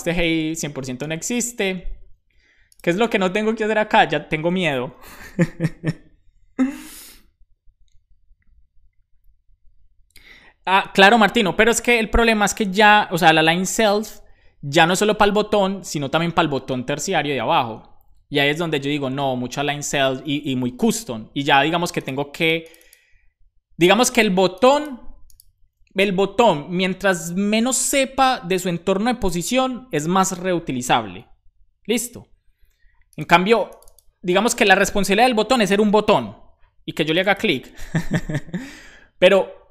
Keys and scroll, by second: 0.4 shift+super+Left, 0.8 BackSpace, 1.2 super+s, 3.5 super+Right, 4.2 Left, 4.4 Left.